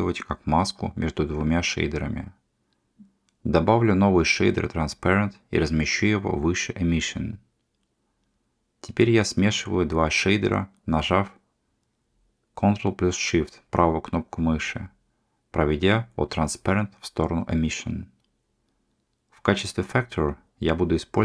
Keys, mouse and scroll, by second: 3.7 click, 4.1 shift+a, 13.0-14.7 ctrl+shift+drag, 15.6 click, 16.6-17.7 drag, 20.0-21.2 drag.